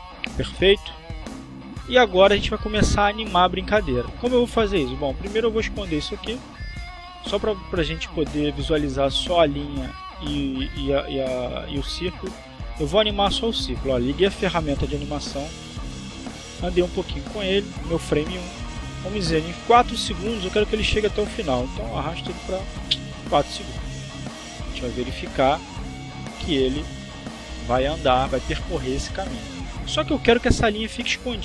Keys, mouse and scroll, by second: 7.3 click, 13.1 click, 14.8 click, 15.8 click, 16.9 click, 20.3 click, 21.5-24.0 drag, 25.1-28.1 drag.